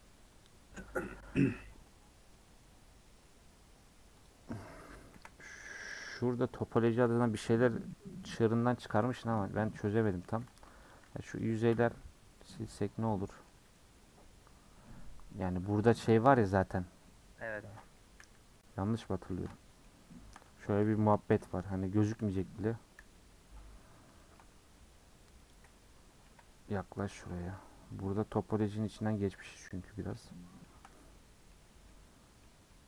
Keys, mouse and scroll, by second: 6.2 middle click, 6.9 KP_Decimal, 7.7 scroll down 4, 7.9 middle click, 8.5 scroll up 1, 8.7 middle click, 9.4-9.8 scroll up 3, 9.8-10.1 scroll down 2, 10.1 middle click, 10.3 3, 10.6 click, 10.9 shift+click, 11.4 shift+click, 11.7 shift+click, 12.5 x, 13.1-15.0 middle drag, 15.0 scroll down 6, 15.3 middle click, 15.8-16.1 scroll up 2, 16.1-18.2 middle drag, 18.2 /, 18.5-20.5 middle drag, 20.5-21.3 scroll up 1, 21.3 /, 21.5 middle click, 21.9-22.3 scroll up 3, 22.3 /, 23.0 /, 23.3-24.2 scroll up 11, 24.2 shift+middle click, 25.5 click, 26.3 KP_Decimal, 26.6-27.3 scroll down 14, 27.3 middle click, 27.6-28.0 scroll up 1, 28.0 middle click, 28.9 click, 29.3-29.6 scroll up 2, 29.6 scroll down 1, 29.8-31.6 middle drag, 31.6-31.9 scroll up 1, 31.9-32.8 middle drag.